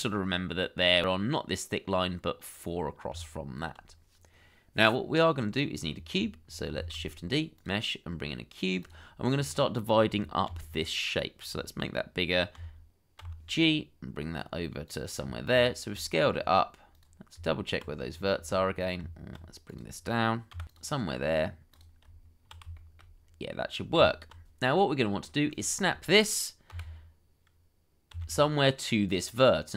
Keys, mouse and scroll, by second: 3.1 Tab, 5.8-6.2 scroll down 1, 6.8 shift+a, 9.3-10.4 scroll down 1, 10.4 s, 12.5 d, 13.2 g, 15.1-15.4 scroll up 1, 16.0 shift+middle click, 16.2-17.0 scroll up 1, 17.3 Tab, 18.0-18.3 scroll up 1, 18.6-19.0 scroll down 1, 19.0 Tab, 19.7 g, 19.9 x, 20.3 y, 21.3-21.8 scroll up 1, 22.0 Tab, 22.7 shift+middle click, 23.2-23.9 scroll up 1, 23.9 Tab, 24.6-25.5 scroll up 1, 28.1 y.